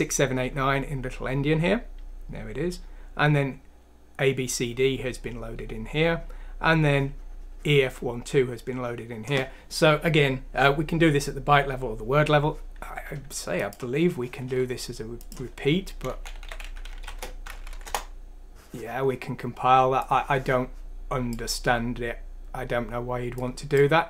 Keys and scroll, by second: 16.1-17.6 typing, 17.7 F6, 17.9 Return.